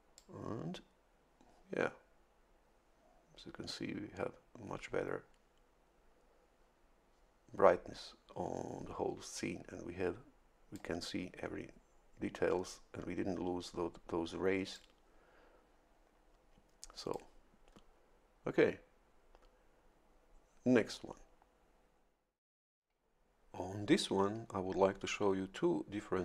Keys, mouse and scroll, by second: 0.1-11.5 drag, 14.7-17.3 drag.